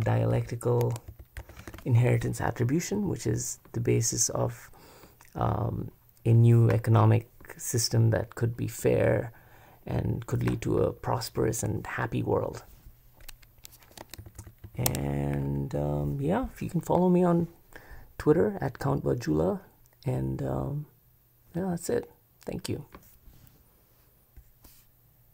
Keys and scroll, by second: 13.9 Escape, 14.0 Escape, 14.2-15.3 typing.